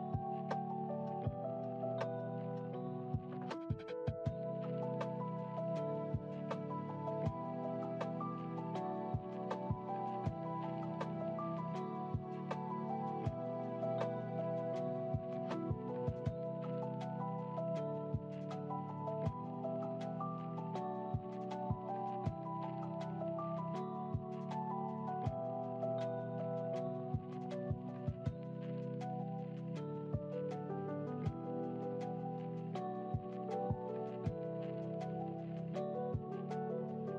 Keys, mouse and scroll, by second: 0.0-3.1 drag, 5.2 click, 7.6 ctrl+z, 8.0 ctrl+z, 9.4 click, 10.0 click, 11.7-14.5 drag, 15.6 click, 17.0-20.6 drag, 20.8 click, 21.5 click, 23.0 click, 24.0-26.0 drag, 26.7 KP_1, 28.4-29.4 drag, 30.9-35.4 drag, 35.6 click.